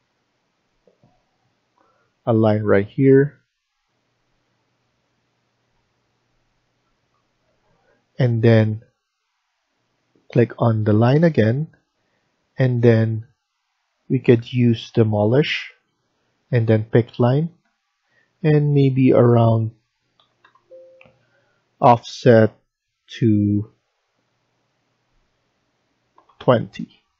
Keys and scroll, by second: 7.3 Escape, 7.6 Escape, 20.1 typing, 26.1 typing.